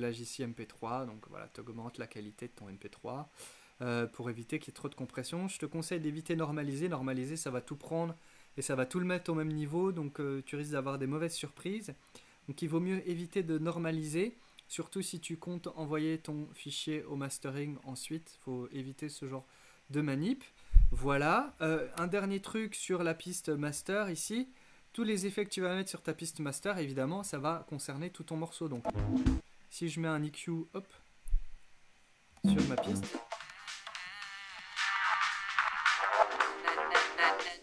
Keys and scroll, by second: 22.1 x, 32.4 space.